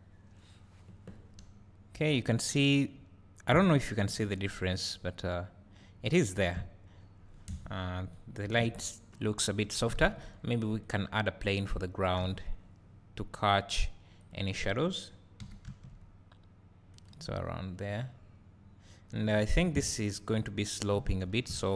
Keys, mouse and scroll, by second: 1.1 scroll up 2, 2.3 scroll down 2, 3.0-3.9 drag, 3.0 `, 3.7 scroll up 2, 4.5-6.3 drag, 7.0-14.3 drag, 7.0-7.5 scroll down 2, 7.5 KP_0, 8.2 scroll down 1, 12.2 s, 15.5 g, 17.0 click, 19.8 Tab, 20.0 scroll down 1, 21.3 ctrl+r.